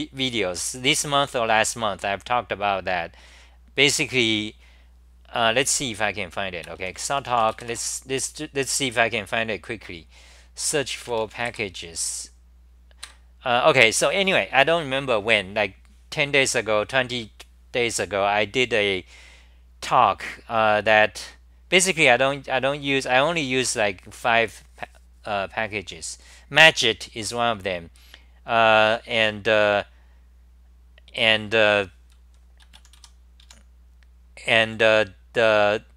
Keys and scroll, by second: 7.7 Return, 11.1 p, 13.0 ctrl+g, 14.2 r, 34.8 w.